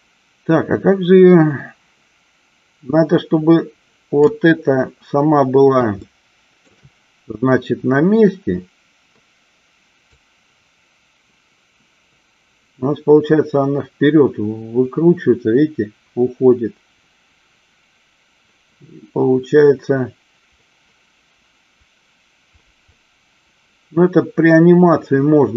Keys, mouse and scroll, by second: 6.0 shift+middle click, 10.2-25.5 drag.